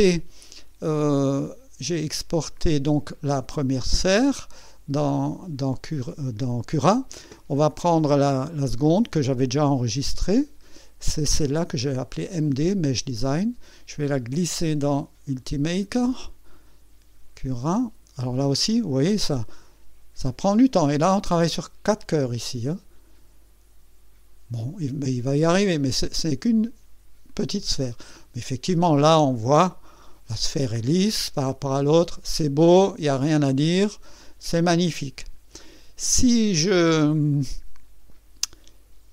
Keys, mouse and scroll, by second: 2.6 click, 9.9 click, 13.1-16.0 drag, 38.1 click.